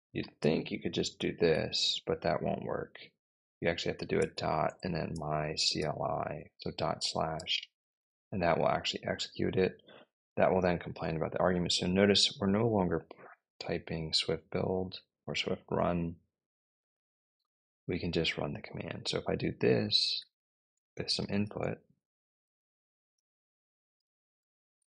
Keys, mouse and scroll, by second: 0.0-1.5 typing, 3.7-6.1 typing, 7.2 Return, 12.0 click, 18.6 Up, 19.5-24.8 typing.